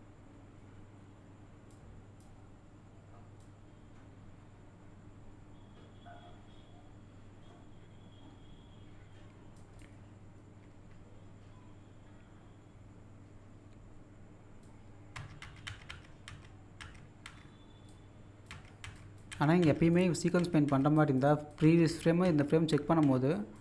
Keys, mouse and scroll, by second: 1.7-3.2 drag, 3.4-15.2 drag, 17.9 click, 19.0 click, 19.9 click, 20.9 click, 23.3 click.